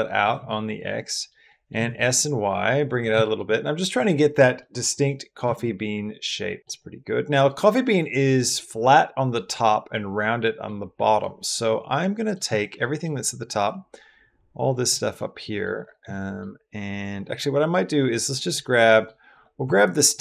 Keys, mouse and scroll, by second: 0.0 click, 0.3 middle click, 1.3 middle click, 1.6 s, 1.8 y, 3.1 shift+middle click, 3.3 middle click, 4.4 middle click, 4.9 click, 5.3 s, 5.4 y, 6.6 click, 7.4 click, 8.1 click, 9.2 click, 10.2 middle click, 10.8 middle click, 11.2 middle click, 11.8 middle click, 12.4 click, 12.6 middle click, 13.9 click, 15.0 middle click, 15.9 middle click, 17.2-18.3 drag, 18.5 middle click, 19.1 click, 19.6 alt+click.